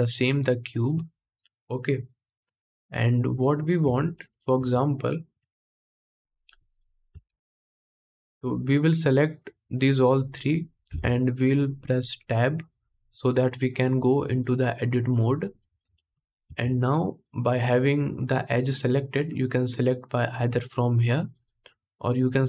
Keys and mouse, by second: 2.5-3.5 middle drag, 3.5 Tab, 4.2 2, 4.7 click, 5.4 shift+click, 6.0 shift+click, 6.4 shift+click, 6.8-9.3 ctrl+middle drag, 7.1 ctrl+Tab, 9.3-22.4 drag, 10.6 Tab, 15.6 alt+a, 16.1 2.